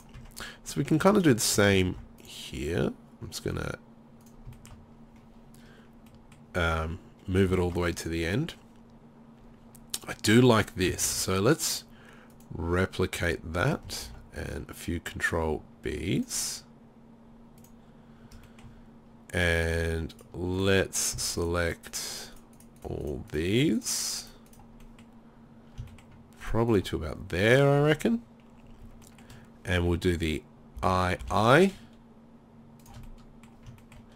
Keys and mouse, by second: 0.0 right click, 0.2 Tab, 1.9 ctrl+r, 4.3-5.4 drag, 11.1 ctrl+r, 13.3-16.2 drag, 14.1 ctrl+r, 17.7-27.7 drag, 20.1-21.3 right drag, 30.8 i.